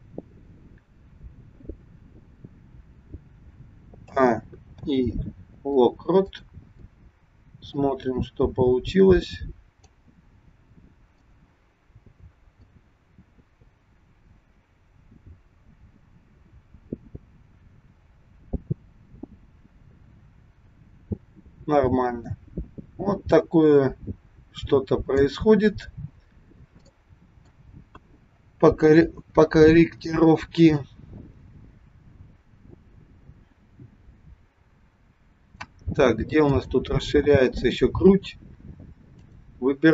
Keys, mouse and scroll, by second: 0.4-1.7 scroll down 3, 4.0 a, 4.8 i, 7.9 click, 11.1 click, 12.8 click, 25.7-26.8 scroll down 9, 26.9 shift+middle click, 27.9 KP_1, 28.3-29.6 scroll up 2, 30.9 click, 36.5 click, 39.3 click.